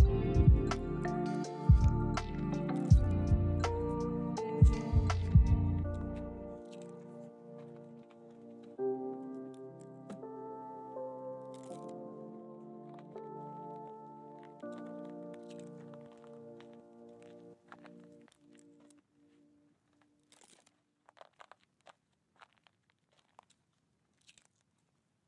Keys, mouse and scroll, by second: 0.0 ctrl+click, 1.2 s, 1.6 z, 5.1 ctrl+click, 5.9 g, 6.9 ctrl+click, 7.8 ctrl+z, 8.1 ctrl+z, 9.6 s, 10.0 z, 13.2 ctrl+click, 13.7-14.3 scroll down 1, 14.3-16.8 scroll up 1, 17.0 ctrl+z, 17.8 scroll down 1, 17.9-18.3 scroll up 1, 18.8 shift+middle click, 19.4 shift+scroll up 2, 20.1 shift+middle click, 21.2 shift+scroll down 1, 24.2 Tab.